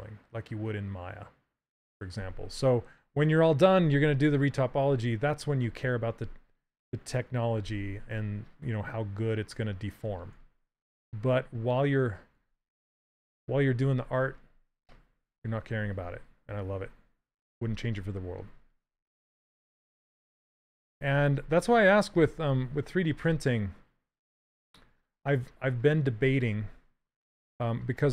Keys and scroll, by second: 10.0 s, 13.7 s, 20.7 shift+f, 22.9 s.